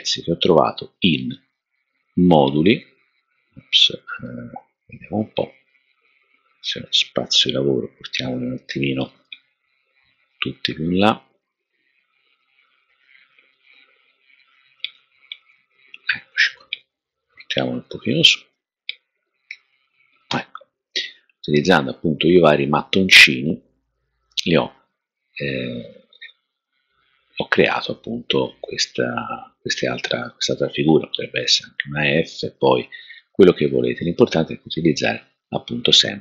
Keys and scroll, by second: 9.2 super+a, 14.7 shift+Up, 14.9 shift+Up, 15.0 shift+Up, 18.1 shift+Up, 19.4 4.